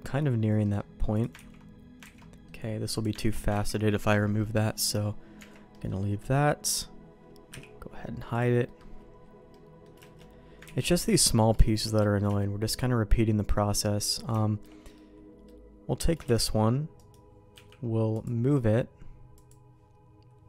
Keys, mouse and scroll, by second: 0.6 middle click, 1.1 click, 1.5 ctrl+x, 2.0 ctrl+z, 2.2 middle click, 2.9 click, 3.3 ctrl+x, 3.6 ctrl+z, 4.8 middle click, 5.4 Tab, 5.7 middle click, 6.4 middle click, 7.5 h, 8.3 click, 8.6 middle click, 9.5 middle click, 10.0 shift+middle click, 10.7 ctrl+s, 10.8 middle click, 11.6 shift+middle click, 12.0 middle click, 12.4 shift+middle click, 13.2 middle click, 14.0 click, 14.4 shift+middle click, 14.9 middle click, 16.3 shift+d, 17.5 m, 19.3 click.